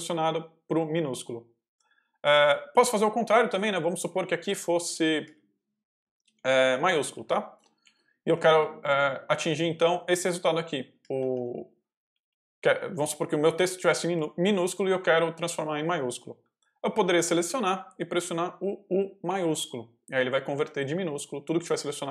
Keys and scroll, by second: 3.3 j, 5.1-14.6 typing, 16.8 ctrl+v, 17.5 ctrl+y, 17.6 ctrl+j, 18.1 shift+j, 19.2-21.4 typing.